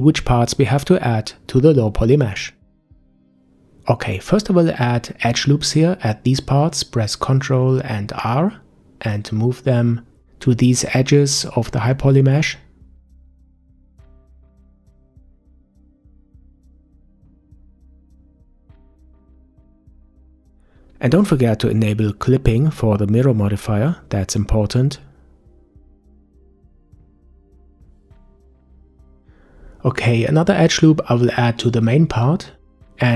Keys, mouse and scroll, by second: 2.4 KP_5, 3.7-5.1 scroll up 4, 5.1-6.5 scroll up 1, 6.6 ctrl+r, 13.1 ctrl+r, 17.6 scroll down 2, 21.4 click, 24.5-27.6 middle drag, 28.5-30.4 shift+middle drag, 30.4 ctrl+r.